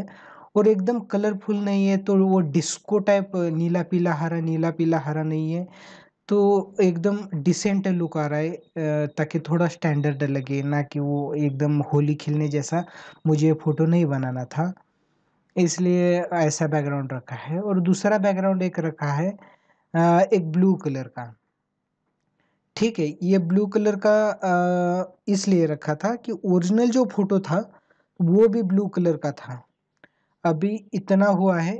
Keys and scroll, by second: 8.3 ctrl+=.